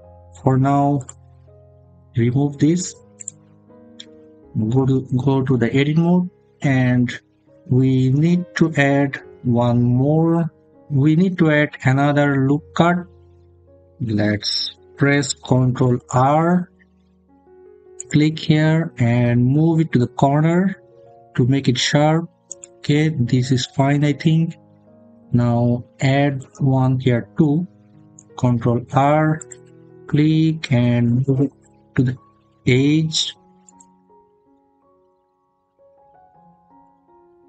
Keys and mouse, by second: 0.8 click, 3.0 click, 4.6 Tab, 6.8 middle click, 7.7 middle click, 15.7 ctrl+r, 17.8 click, 22.3 click, 23.8 middle click, 28.1 ctrl+r, 29.2 click, 33.5 click, 35.6 middle click.